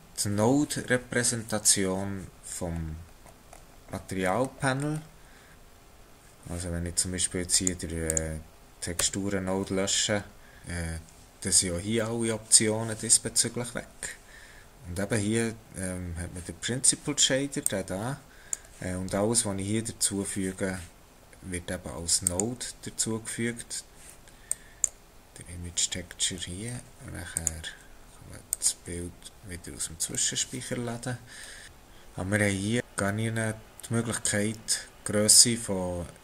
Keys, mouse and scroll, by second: 2.7-5.1 scroll down 18, 5.5-7.5 scroll up 2, 7.5 click, 8.1 click, 9.0 x, 14.6 click, 17.7 click, 22.3 click, 26.3-27.3 scroll up 7, 27.3 click, 30.1-30.9 scroll down 3, 30.9-31.6 scroll down 1.